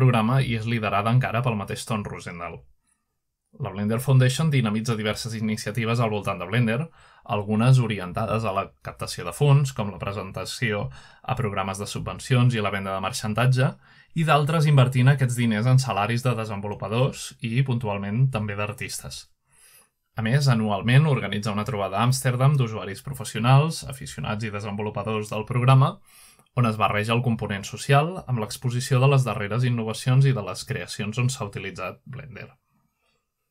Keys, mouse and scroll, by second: 2.7-4.3 scroll down 2, 4.3-5.9 scroll down 1, 6.4-8.6 drag, 8.9-9.6 drag, 11.6-12.0 scroll down 3, 12.8-13.9 scroll down 1, 14.1-16.3 scroll down 1, 17.9 click, 19.5-20.3 scroll down 1, 20.3-21.1 scroll up 1, 21.1-22.7 scroll up 1, 25.5 ctrl+Tab, 26.4-27.3 scroll up 1, 27.4-28.2 drag, 28.5-29.1 drag, 30.0-30.7 drag, 30.5-33.1 scroll down 1.